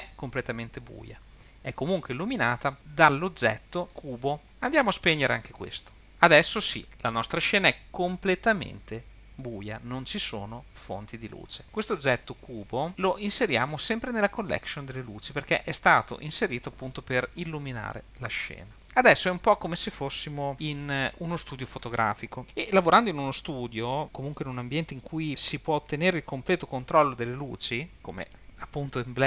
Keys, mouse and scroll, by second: 6.0 click, 13.3 click, 14.1 click.